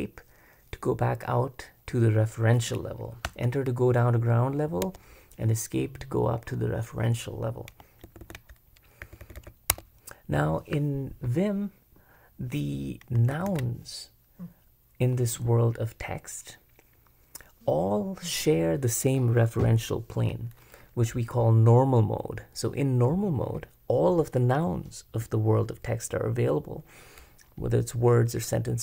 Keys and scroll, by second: 3.2 Return, 4.8 Escape, 8.0 super+b, 8.2 super+b, 9.1-9.7 typing, 13.3 super+b, 13.5 super+b.